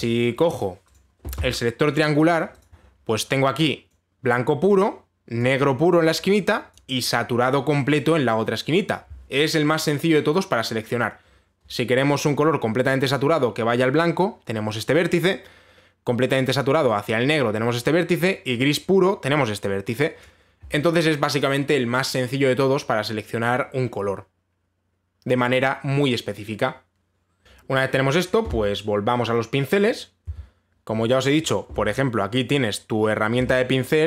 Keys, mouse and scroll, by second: 1.1 click, 1.5 click, 2.5 click, 3.3 click, 4.5 click, 6.0 click, 7.3 click, 20.8 click, 30.9 b.